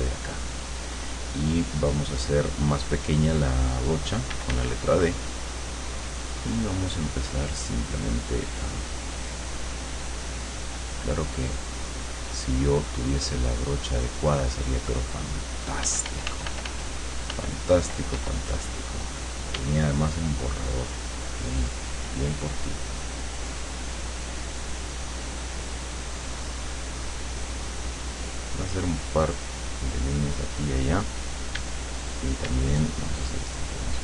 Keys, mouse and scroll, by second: 4.4 d, 8.6 click, 9.7-10.7 drag, 13.3 click, 14.8 click, 15.9 f, 18.2 e, 19.6 d, 20.6 click, 22.0 click, 23.4 click, 24.4 click, 25.8 click, 26.2 click, 27.7 click, 28.8 click, 30.1 click, 31.6 d, 32.5 d, 33.0 click, 33.6 click.